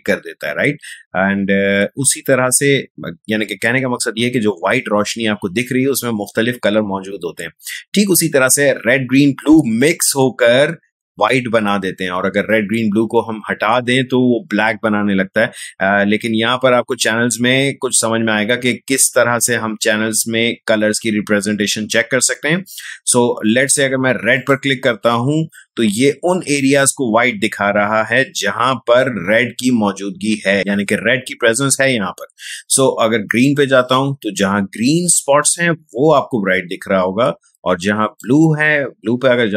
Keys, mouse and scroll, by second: 24.3 click, 33.4 click, 38.0 click.